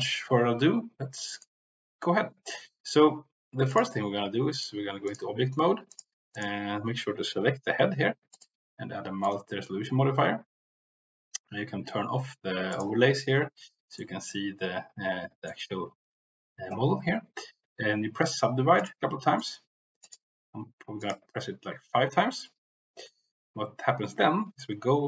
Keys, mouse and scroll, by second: 1.2-3.8 drag, 4.4-5.1 drag, 8.5-9.3 drag, 12.6 click, 13.9-15.5 middle drag, 18.2 click, 19.3 click, 20.0 click, 22.9 click, 24.5 middle click.